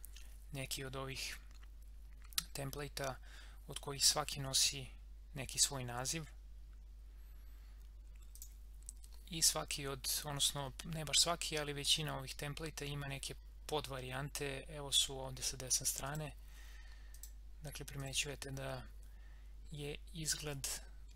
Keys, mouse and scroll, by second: 8.3 click, 16.0 click.